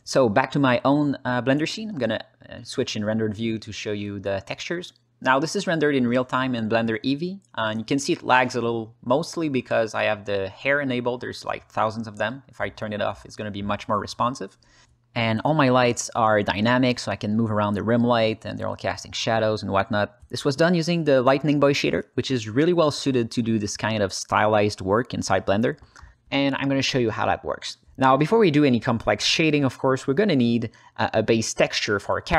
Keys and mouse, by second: 2.1 z, 3.2-9.7 alt+middle drag, 11.3 click, 11.8-13.2 alt+middle drag, 13.5 shift+middle click, 14.9 alt+middle click, 15.4 alt+middle click, 15.8 r, 16.0 z, 21.5 Escape, 22.1 click, 22.6 alt+middle click, 22.9 ctrl+middle drag, 23.7 alt+middle drag, 24.2-29.2 drag, 29.4 alt+middle click, 29.7-30.1 alt+shift+middle drag, 30.6-32.3 drag.